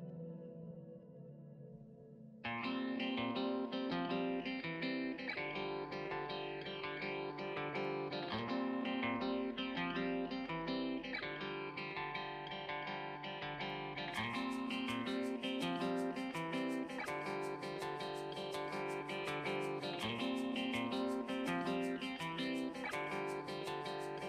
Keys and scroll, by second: 10.6 ], 14.2 [, 15.5 [, 21.3 ctrl+z.